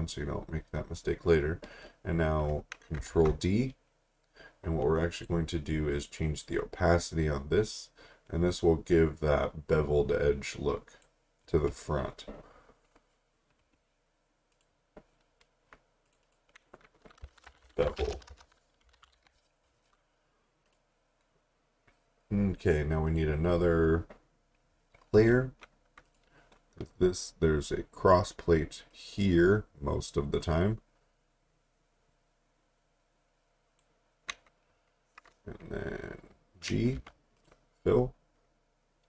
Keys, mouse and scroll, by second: 3.1 ctrl+d, 5.1 click, 14.5 click, 17.1-19.6 typing, 20.7 click, 26.0 click, 28.9 click, 37.4 click.